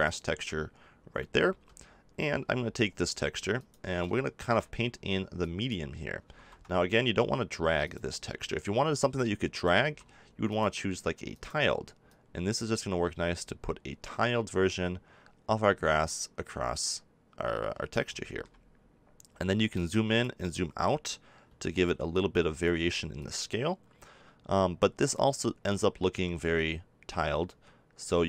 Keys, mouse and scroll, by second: 1.5 g, 2.4 f, 4.7 click, 6.3 ctrl+z, 6.9 f, 9.8 ctrl+z, 13.3 click, 19.7-21.4 drag, 21.4 f.